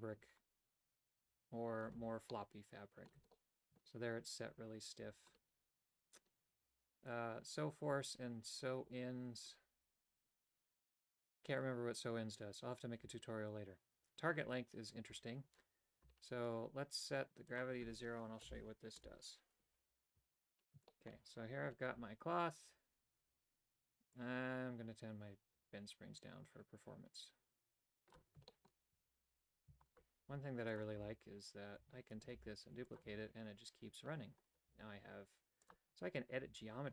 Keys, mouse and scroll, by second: 2.4 middle click, 3.4 shift+middle click, 17.6-19.8 drag, 20.3 a, 21.0 shift+middle click, 24.3-28.2 drag, 28.5 shift+middle click, 28.9-33.1 typing, 29.9 right click, 34.7 g, 36.4 a.